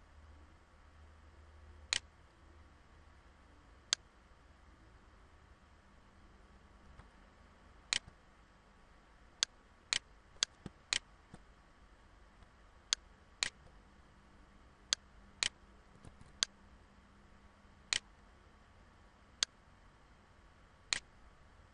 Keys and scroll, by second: 15.6 ctrl+z, 19.1 ctrl+z.